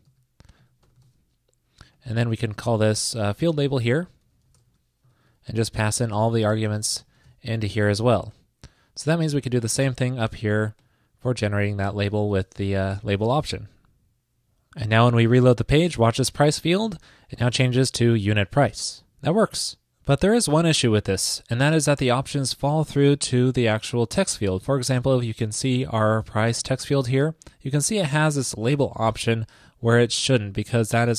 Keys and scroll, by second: 0.5 super+x, 1.1 super+v, 2.6 alt+Left, 2.8 alt+Left, 3.1 super+v, 3.7 alt+Left, 5.2 super+Right, 5.7 alt+shift+Left, 8.2 shift+Left, 9.8 super+c, 12.4 super+v, 12.6 super+s, 16.9 super+r, 22.1 alt+super+u.